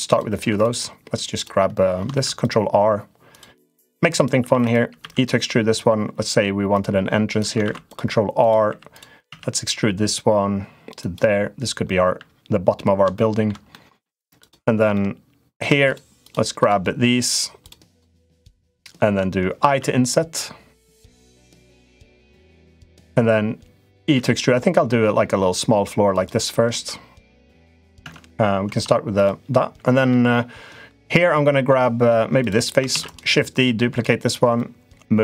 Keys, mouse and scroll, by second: 0.3 3, 0.3 click, 1.1 click, 1.9 ctrl+r, 3.6 click, 4.3 3, 4.4 click, 4.7 e, 7.4 ctrl+r, 8.5 3, 8.7 click, 9.0 e, 12.9 shift+middle click, 13.5 middle click, 14.2 click, 14.7 shift+middle click, 17.4 shift+click, 17.7 shift+click, 19.5 i, 23.9 e, 26.7 middle click, 27.8 Tab, 28.4 Tab, 28.9 click, 29.8 middle click, 31.4 middle click, 32.2 click, 32.7 shift+d, 33.3 click, 34.3 click.